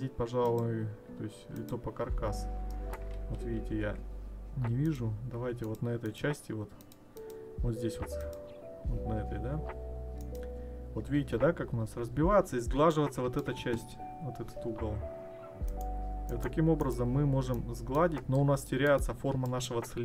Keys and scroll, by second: 3.2 ctrl+z.